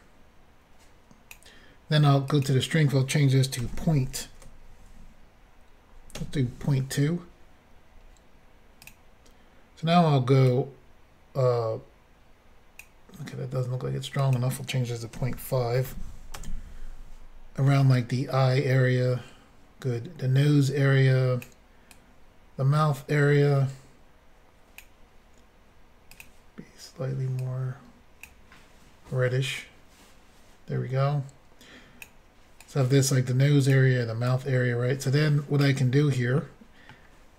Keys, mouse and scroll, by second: 2.3 click, 2.5 click, 3.6 ., 6.2 2, 8.8 click, 8.9 click, 10.5 click, 14.2 click, 15.1 ., 15.8 5, 16.3 Return, 17.9 click, 21.9 click, 26.1 click, 26.2 click, 27.4 click, 29.6 click, 32.6 click, 34.3 click, 36.4 middle click.